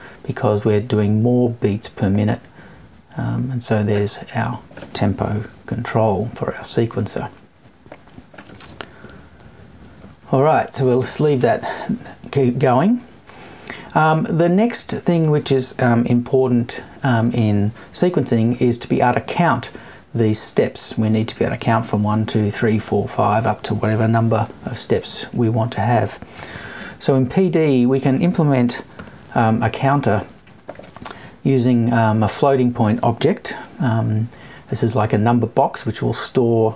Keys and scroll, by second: 5.3 Left, 9.0 Left, 9.5 Down, 10.0 Right, 10.2 Down.